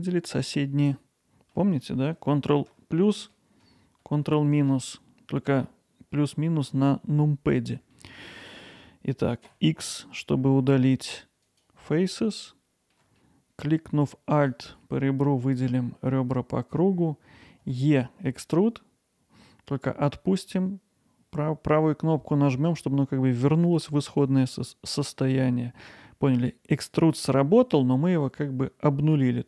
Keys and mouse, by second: 1.0 alt+middle click, 3.2 ctrl+KP_Add, 3.6 ctrl+KP_Add, 3.9 ctrl+KP_Subtract, 4.2 ctrl+KP_Subtract, 8.0 alt+middle click, 9.5 x, 12.3 alt+middle click, 14.4 alt+click, 17.7 e, 24.2-29.4 right drag.